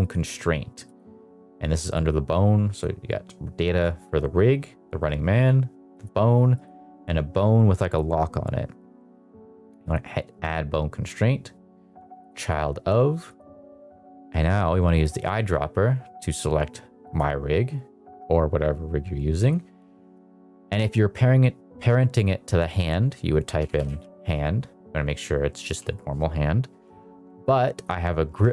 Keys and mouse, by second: 2.7 click, 5.3 click, 5.9 click, 6.4 click, 9.8-12.3 drag, 13.2 click, 19.4-27.1 drag, 27.7-28.5 drag.